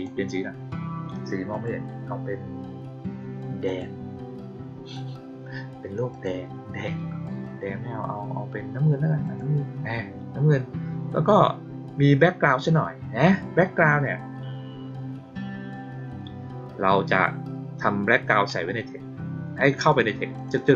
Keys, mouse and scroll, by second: 1.4 click, 3.6 click, 6.0 click, 9.2 click, 19.7 click, 20.3 click, 20.5 click.